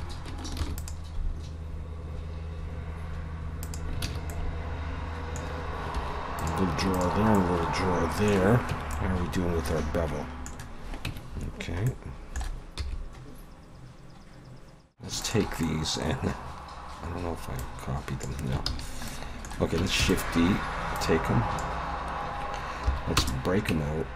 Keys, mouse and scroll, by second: 0.6 ctrl+r, 4.1 alt+a, 4.3 middle click, 6.0 3, 6.4 click, 6.9 shift+click, 7.4 middle click, 8.7 Tab, 8.9 middle click, 11.1 Tab, 11.9 middle click, 12.8 e, 14.5 alt+a, 14.7 ctrl+z, 14.7 click, 15.2 shift+click, 15.6 middle click, 17.6 click, 18.7 ctrl+z, 19.1 middle click, 20.0 shift+d, 21.0 click, 22.9 p, 23.7 Tab.